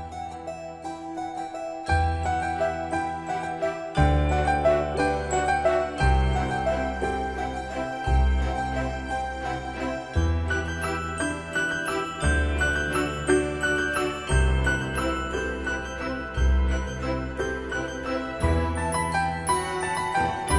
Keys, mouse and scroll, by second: 3.5 scroll up 1, 10.0-20.5 drag.